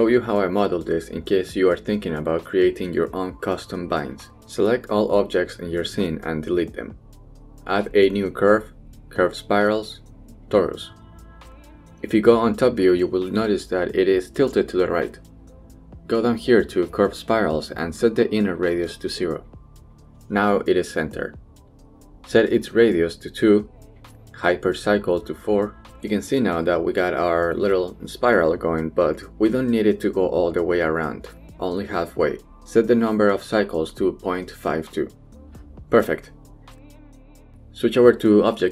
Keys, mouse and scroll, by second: 5.2 a, 5.7 x, 7.4 shift+a, 13.4 KP_7, 19.4 click, 22.2 middle click, 24.0 click, 25.2 click, 26.2-31.0 middle drag, 32.4-34.2 drag, 36.6-38.0 middle drag, 38.0 Tab, 38.2 drag.